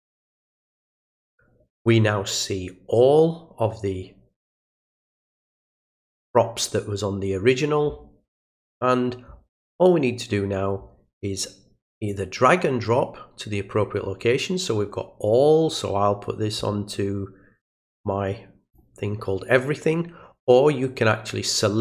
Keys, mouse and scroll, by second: 12.1-18.7 drag, 21.5 click.